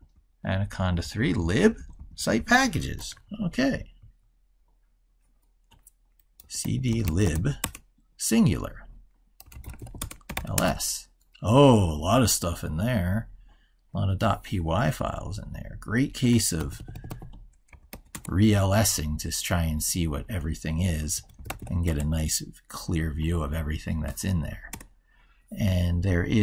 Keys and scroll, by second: 3.1 ctrl+super+Right, 16.4 ctrl+-.